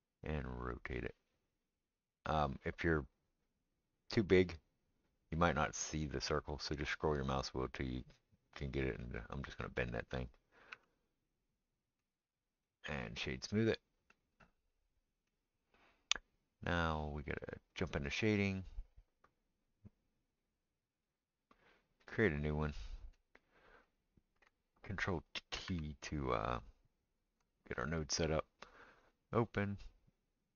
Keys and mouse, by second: 10.7 Tab, 12.9-25.6 right drag, 17.9 drag, 17.9 middle drag, 21.0 click, 22.1-23.9 drag, 23.5-23.9 middle drag, 25.6 ctrl+t, 25.6-28.0 middle drag, 28.0-29.5 right drag, 29.0-30.5 drag.